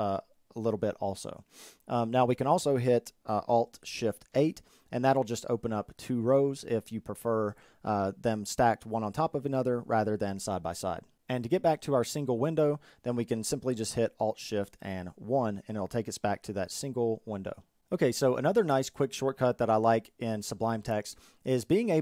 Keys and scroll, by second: 3.4 alt+shift+8, 14.1 alt+shift+1, 14.7 alt+shift+1.